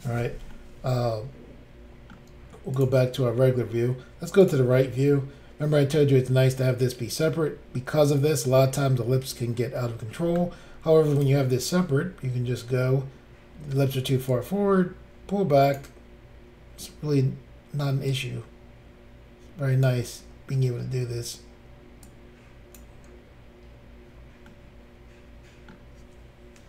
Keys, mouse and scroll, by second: 0.5 middle click, 2.7 click, 4.4 click, 4.5 click, 11.2 click, 11.2 click, 11.7 click, 14.3 click, 18.1 click, 22.0 click, 25.7 middle click.